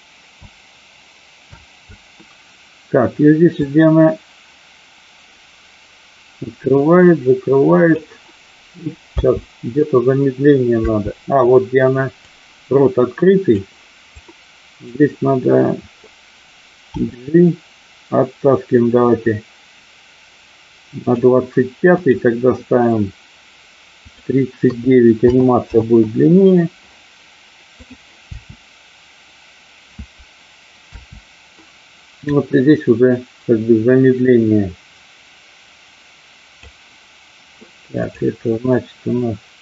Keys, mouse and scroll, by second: 0.6 space, 1.6 space, 3.7-8.0 drag, 9.2 space, 12.3-13.5 drag, 12.3 space, 14.1 click, 16.9 g, 21.1 click, 21.9 click, 23.9-25.8 drag, 28.2 space, 32.2-36.7 drag, 32.2 space.